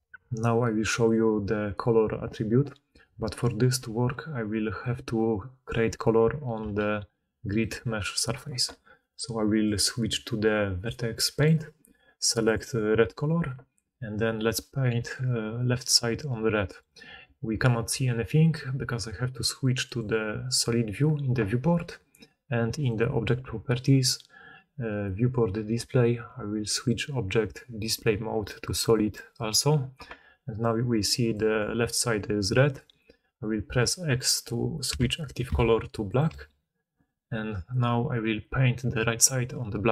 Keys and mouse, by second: 4.7 middle click, 4.7 right click, 6.5 g, 12.4-14.3 middle drag, 14.3-20.0 drag, 20.0-22.7 middle drag, 22.7 drag, 22.8-26.7 middle drag, 26.7-39.9 drag, 34.8 x, 35.4 x, 36.3 x.